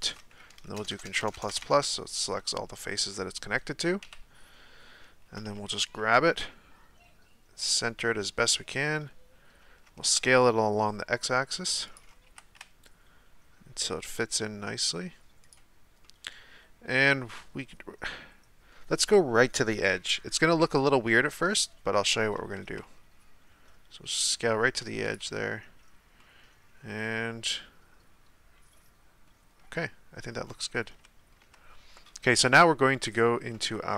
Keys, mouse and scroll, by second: 0.7-1.5 ctrl+KP_Add, 1.6 ctrl+KP_Add, 2.3-4.0 middle drag, 4.0 KP_1, 5.5 g, 9.7 s, 12.3 g, 16.0-19.2 middle drag, 21.2 KP_1, 22.4 s, 26.2-30.4 middle drag, 30.4-31.0 scroll down 1, 31.0-33.1 shift+middle drag, 33.1 click.